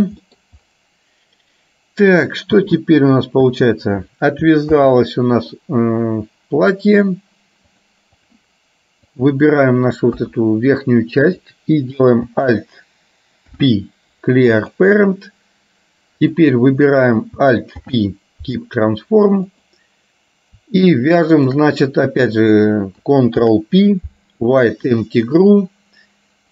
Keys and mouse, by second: 2.7 space, 3.5 space, 4.9 ctrl+z, 7.9 click, 10.2 KP_1, 13.6 alt+p, 17.9 alt+p, 21.5 shift+click, 23.5 ctrl+p.